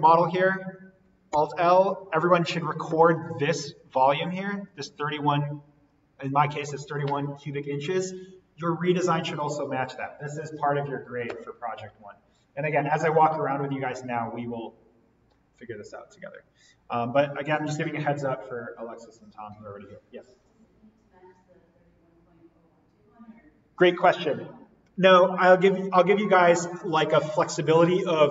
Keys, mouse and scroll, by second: 1.3 alt+l, 4.6-8.2 drag.